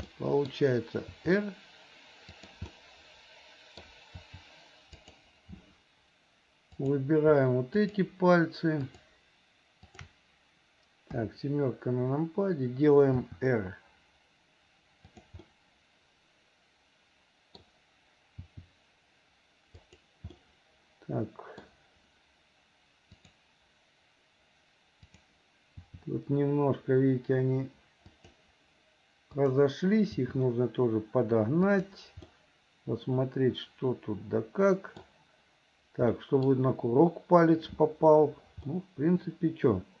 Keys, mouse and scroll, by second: 0.1 middle click, 1.2 r, 2.8-3.9 middle drag, 5.2 r, 6.8 click, 7.9 shift+click, 8.9 shift+click, 9.9 shift+click, 11.2 KP_7, 13.3 r, 15.4-17.6 middle drag, 18.5 r, 20.4-21.7 middle drag, 23.2 click, 25.1 click, 25.8 r, 29.4 click, 30.2 r, 32.4-35.1 middle drag, 36.2 middle click, 38.7-40.0 middle drag.